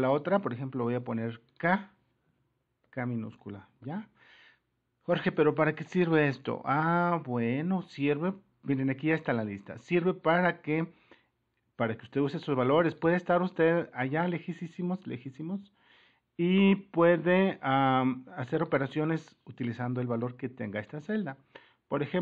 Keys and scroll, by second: 12.0 super+-, 14.6-15.6 Right, 20.9 super++.